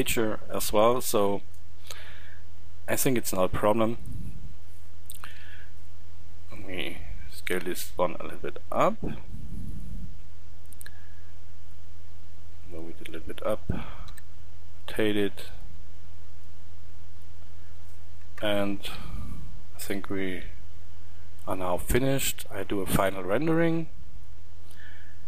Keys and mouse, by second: 3.9-5.1 middle drag, 5.1 shift+d, 6.5 s, 9.6-15.3 drag, 13.9 r, 15.4-18.1 drag, 18.1 KP_0.